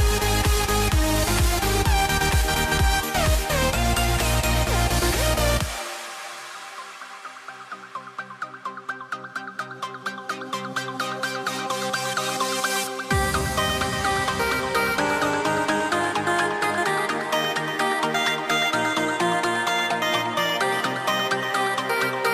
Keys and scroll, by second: 1.9 super+z, 12.0 shift+m, 21.7 shift+m.